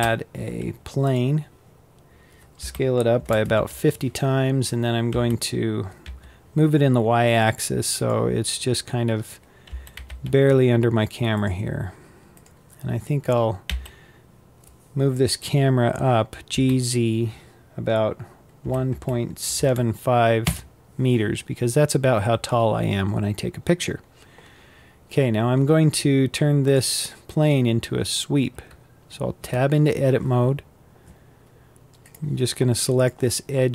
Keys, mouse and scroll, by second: 2.2 s, 3.8 scroll down 7, 4.6 g, 8.1-8.9 scroll up 15, 9.2 g, 12.0 click, 13.2 g, 22.9-25.1 scroll down 20, 25.1-26.3 scroll up 3, 26.3 click, 26.7-27.5 scroll down 5, 27.5-29.1 scroll up 2, 29.1 Tab, 31.6 click, 32.6 click, 33.0 scroll down 4, 33.4-33.7 middle drag.